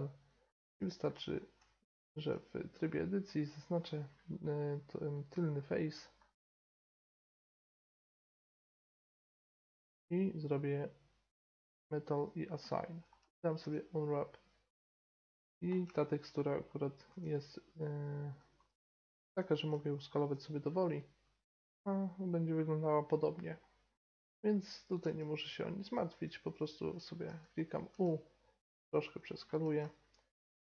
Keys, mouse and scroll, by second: 0.4-0.8 middle drag, 0.8 click, 0.8 middle drag, 1.0-1.6 drag, 1.6 Tab, 3.3 middle click, 5.1 right click, 5.6 click, 7.1-9.4 middle drag, 9.4-13.6 drag, 12.7 middle click, 13.6 u, 17.1 s, 18.5 g, 19.7 s, 20.6 middle click, 23.9 middle click, 25.0 s, 26.3 s, 27.2 g, 27.9 s, 29.0 middle click, 29.6 Tab.